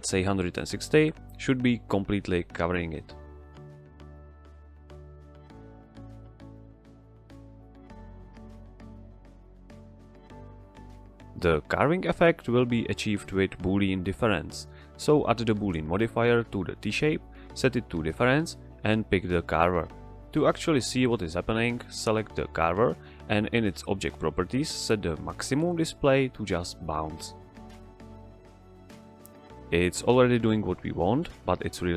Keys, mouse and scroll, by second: 0.1 g, 0.6 ctrl+click, 0.8-1.9 middle drag, 2.0 z, 2.4-3.5 middle drag, 3.8 g, 4.3 click, 5.2 z, 6.1 |, 6.8 click, 10.8 click, 11.8-12.4 middle drag, 14.1 click.